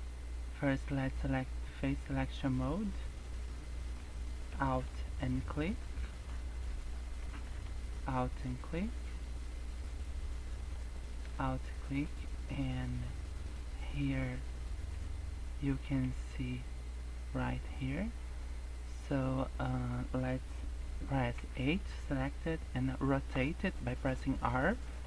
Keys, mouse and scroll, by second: 2.3 click, 4.6 alt+click, 6.1 alt+click, 7.9 alt+shift+click, 8.0 alt+shift+click, 10.6 alt+shift+click, 11.3 scroll down 4, 12.0-12.5 scroll down 8, 12.5-13.1 scroll up 5, 13.4-13.8 scroll down 3, 14.1-15.2 scroll up 4, 15.4-15.8 scroll up 4, 16.0-16.5 scroll down 3, 16.5-16.8 scroll up 3, 17.4-17.8 scroll down 3, 17.7-18.0 scroll up 3, 18.1 scroll down 1, 18.3 scroll up 2, 18.7 scroll down 2, 19.2-19.7 scroll up 2, 20.2 scroll down 2, 20.5 scroll up 1, 21.3 a, 23.2 r.